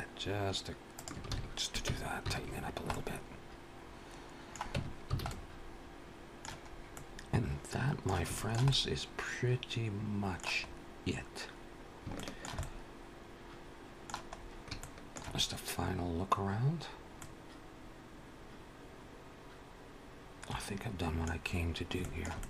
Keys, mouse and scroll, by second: 1.1 alt+a, 1.9 Tab, 2.3-3.0 scroll down 3, 2.8 middle click, 4.6 Tab, 5.0 alt+a, 5.1 middle click, 6.5 scroll up 2, 6.8 middle click, 8.2 shift+middle click, 8.5 middle click, 10.5-10.8 scroll up 2, 11.5-11.9 scroll down 1, 12.0 shift+middle click, 12.4 middle click, 14.2-14.5 scroll up 3, 14.6 shift+middle click, 15.9-16.3 scroll down 1, 16.6 scroll down 1, 16.9 middle click, 21.2-21.8 scroll down 2, 21.8 shift+middle click, 22.2 middle click.